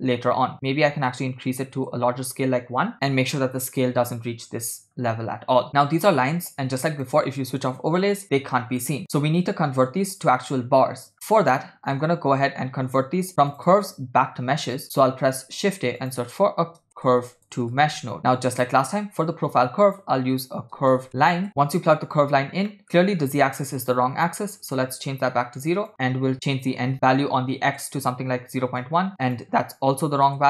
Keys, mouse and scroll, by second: 0.5-1.8 drag, 6.9 click, 8.8 click, 11.4 middle click, 13.0 shift+s, 13.4 click, 13.4 right click, 13.6 click, 14.9 click, 15.2 shift+a, 19.1 shift+a, 21.5 middle click, 21.5-22.3 scroll down 5, 22.7 middle click, 22.9-23.6 scroll up 2, 23.6-24.8 drag, 25.8-27.8 drag, 28.8 click, 29.2-30.4 drag.